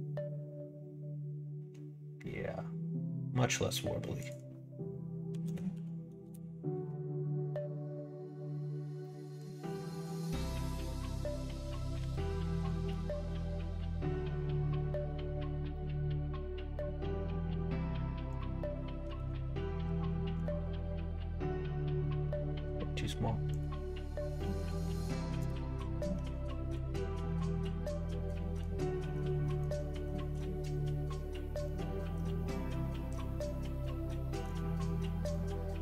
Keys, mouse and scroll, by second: 4.1-8.4 drag, 9.0 middle click, 11.1-15.1 drag, 15.7-16.7 middle drag, 18.3-22.5 drag, 23.5-27.6 drag, 28.3 middle click, 29.0 middle click, 29.4 middle click, 29.8 shift+middle click, 30.3-31.6 middle drag, 31.9 middle click, 32.3 middle click, 33.0 middle click, 33.3-34.4 middle drag, 34.7 middle click.